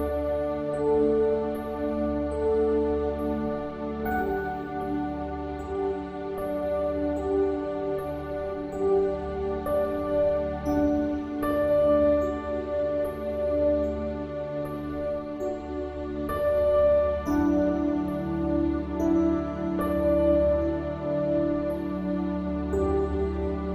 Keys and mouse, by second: 2.4 click, 10.1 click, 15.6 click, 17.8 click.